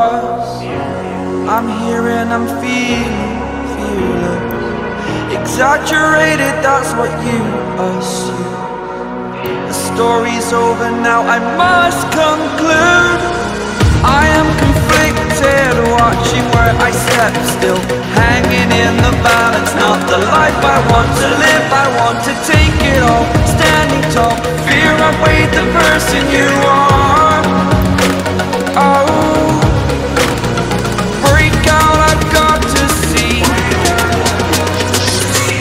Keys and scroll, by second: 0.3 ctrl+t, 7.4 ctrl+t, 25.6-26.3 typing, 29.0 [.